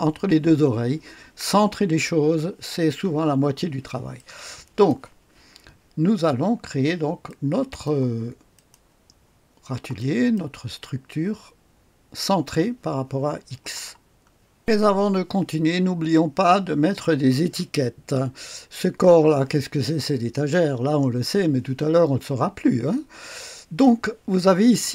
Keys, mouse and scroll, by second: 4.1-5.3 drag, 7.2 click, 8.5 click, 8.9 click, 9.5-10.0 scroll up 1, 10.0 right click, 13.9-14.6 scroll down 1, 14.6 click, 18.7 click.